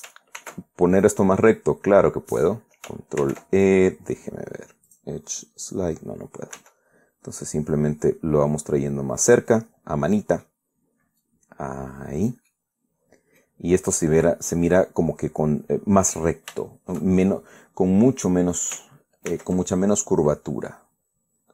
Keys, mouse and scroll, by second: 1.1 ctrl+r, 1.7 ctrl+click, 3.9 ctrl+e, 5.6 click, 7.3 g, 9.9 click, 10.4 middle click, 11.9-13.2 drag, 13.2-14.3 middle drag, 17.3 shift+middle click, 20.0 ctrl+r.